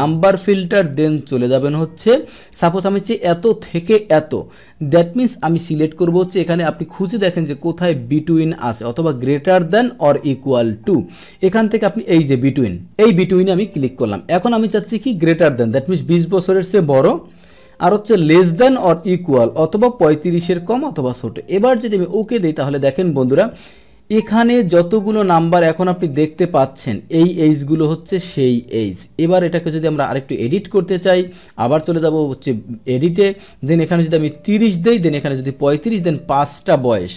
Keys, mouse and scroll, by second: 13.0 click, 19.0-20.0 drag, 22.0 click, 24.2-26.0 scroll down 1, 26.0 middle click, 26.8-30.5 drag, 32.0 click, 35.9 click.